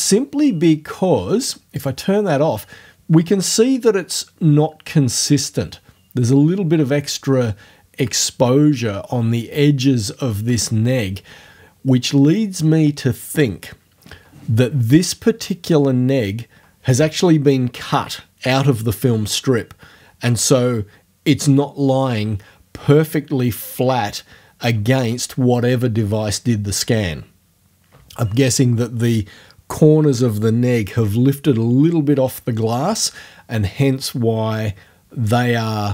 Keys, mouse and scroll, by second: 1.8 click.